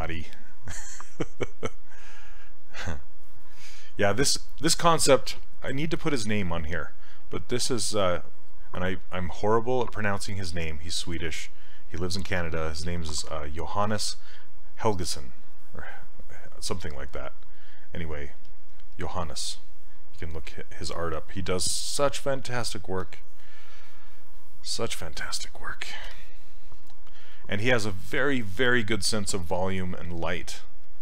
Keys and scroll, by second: 26.1 s.